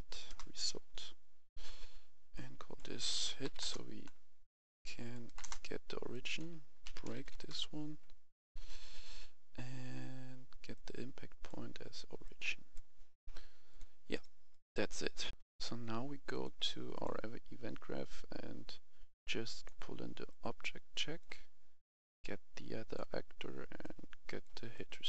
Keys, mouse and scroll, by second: 0.2 Return, 2.3 click, 3.3 typing, 3.6 Return, 5.0 click, 5.3 BackSpace, 5.4 Return, 6.1 click, 6.8-7.6 typing, 8.7-10.7 scroll down 1, 10.7-14.5 drag, 15.3 F11, 16.3-25.0 drag.